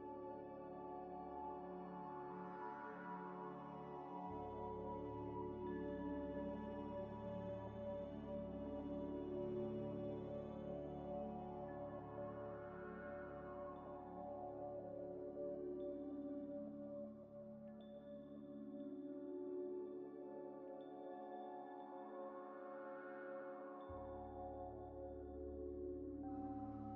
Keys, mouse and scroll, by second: 0.1 scroll up 1, 0.3 scroll down 1, 0.4 scroll up 1, 3.0 scroll down 1, 5.3-8.5 scroll down 1, 8.5 double click, 8.8 Tab, 9.2 Tab, 9.8 Tab, 10.3 ی, 11.7 scroll up 1, 12.1 Tab, 12.8 middle click, 12.8 middle click, 14.5 middle click, 14.6 scroll down 1, 15.3 Tab, 15.8 Tab, 15.8 middle click, 18.2 Tab, 18.7 scroll up 1, 20.6 scroll down 1, 21.9 scroll down 1, 22.0-23.7 scroll up 1, 24.0 scroll down 1, 24.3 middle click.